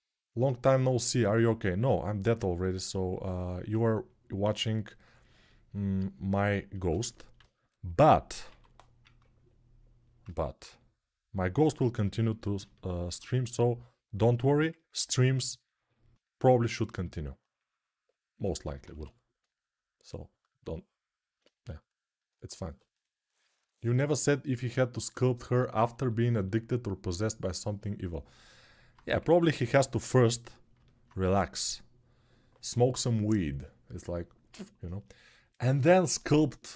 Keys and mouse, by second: 8.2 1, 18.7 1, 20.5 alt+click, 24.6 ctrl+alt+shift+click, 25.1-36.7 ctrl+alt+drag, 28.9 3.